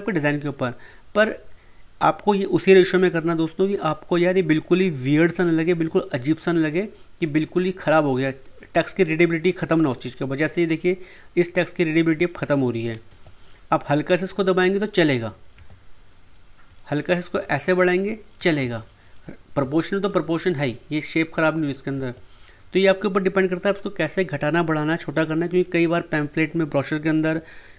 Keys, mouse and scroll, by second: 8.2-11.7 drag, 12.9 ctrl+Num_Lock, 12.9 click, 13.1 ctrl+z, 14.1-15.5 drag, 15.5 ctrl+z, 16.7-18.6 shift+drag, 18.6 ctrl+z, 19.6-21.9 drag, 21.9 ctrl+z.